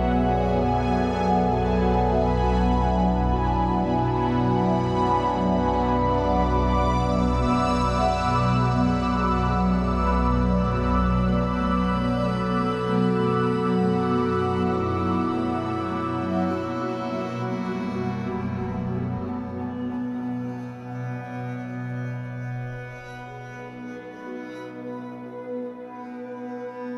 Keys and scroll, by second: 0.5 Escape, 5.9 l, 6.9 shift+w, 7.7 Escape, 10.1 shift+w, 10.9 Escape, 14.4 shift+w, 15.1 Escape, 20.9 ctrl+s, 22.4 F8.